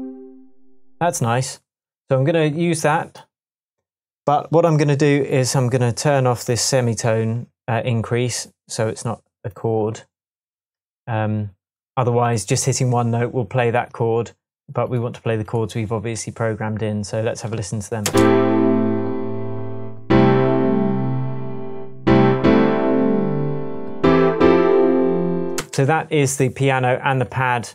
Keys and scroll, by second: 18.0 space, 25.5 space.